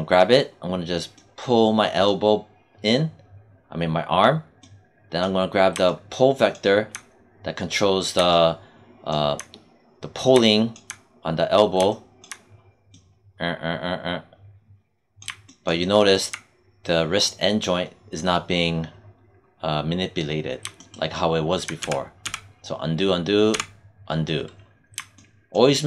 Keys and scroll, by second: 23.4 z.